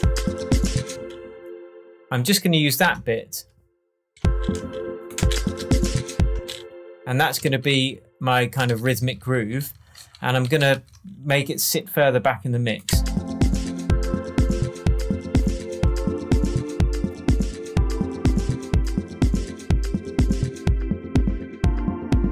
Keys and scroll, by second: 2.8 BackSpace, 4.1 space, 6.3 space, 7.4 super+d, 8.6 super+d, 12.8 space.